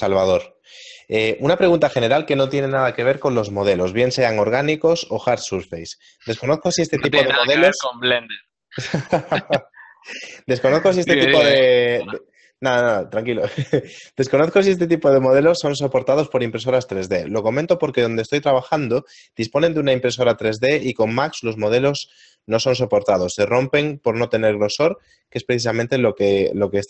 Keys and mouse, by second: 2.8 middle click, 5.3 ctrl+Tab, 6.2 right click, 8.8 shift+d, 10.4 r, 11.6 KP_0, 12.9-13.9 typing, 14.0 click, 15.4 x, 17.2 g, 17.6 x, 19.7 click, 20.8 Tab, 22.3 right click, 23.7 ctrl+click, 24.6 middle click.